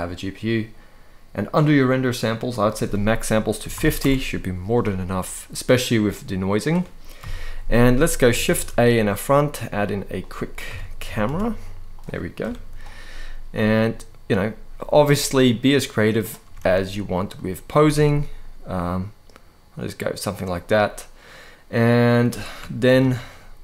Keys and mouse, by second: 2.3-3.7 drag, 6.9 KP_1, 8.2 shift+a, 10.4 KP_3, 10.7 g, 10.9 y, 11.6 click, 12.1 KP_0, 13.2 g, 15.1-15.9 drag, 16.1 r, 16.3 r, 17.0 click, 17.5 r, 17.6 r, 22.6 ctrl+b.